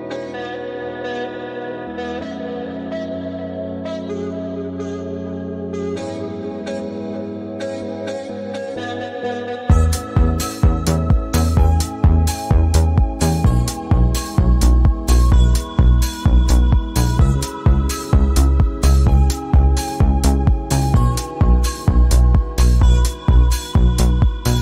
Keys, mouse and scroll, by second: 3.6 alt+scroll down 1, 3.8-4.3 click, 4.3 space, 4.5-4.9 click, 6.7 ctrl+alt+2, 7.2-8.3 drag, 10.3 ctrl+z, 10.6 click, 12.1 ctrl+a, 12.9-13.9 drag, 15.2 alt+scroll up 1, 15.8-16.3 alt+scroll down 1, 16.7-17.0 drag, 21.1-22.2 alt+scroll up 4, 22.5 click.